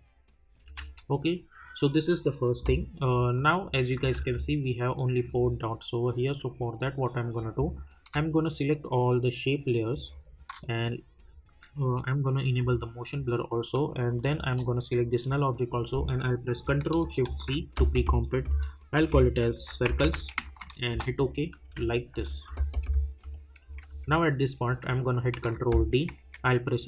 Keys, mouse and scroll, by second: 0.6 space, 3.3 click, 4.0 space, 7.6 click, 9.9 shift+click, 14.2 shift+click, 20.6-21.6 typing, 20.9 Return, 26.2 r.